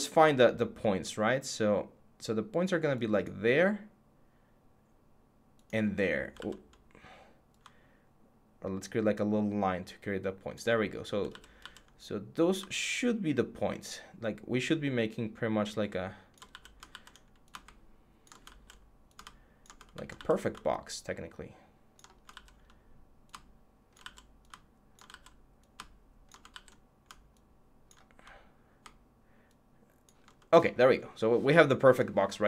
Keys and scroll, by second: 6.1 ctrl+z, 11.1 ctrl+z, 16.3 z, 18.2 ctrl+z, 19.9 ctrl+z, 22.1 ctrl+z, 23.8 ctrl+z, 24.9 ctrl+z, 26.3 ctrl+z.